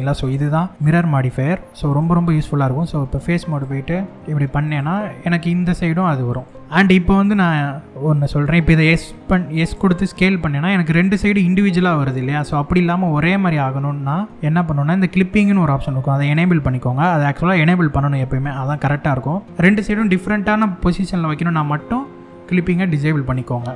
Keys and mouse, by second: 1.5 click, 3.1 click, 4.3 click, 5.0 e, 5.9 click, 6.5 middle click, 15.9 click.